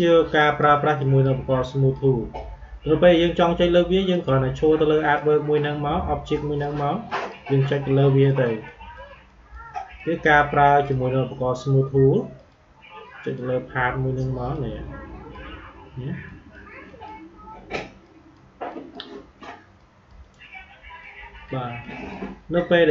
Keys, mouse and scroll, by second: 4.0 click, 9.6-22.9 drag.